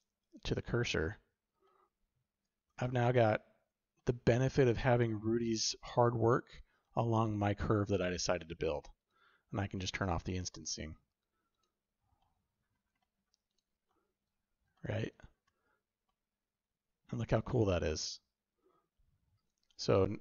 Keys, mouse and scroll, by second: 1.6-2.3 shift+middle drag, 2.3 typing, 2.6 click, 3.9-4.3 drag, 5.0-6.1 shift+middle drag, 6.1 shift+click, 6.8 middle click, 7.3-8.0 shift+middle drag, 8.9 click, 11.4 click, 12.1 shift+middle drag, 12.9 drag, 12.9 middle drag, 12.9 right drag, 13.4 click, 13.8 shift+drag, 14.7 shift+drag, 16.0 shift+drag, 16.0-17.0 shift+middle drag, 17.4 middle click, 17.9-19.4 shift+middle drag, 19.8-20.2 drag, 19.8-20.2 middle drag, 19.8-20.2 right drag.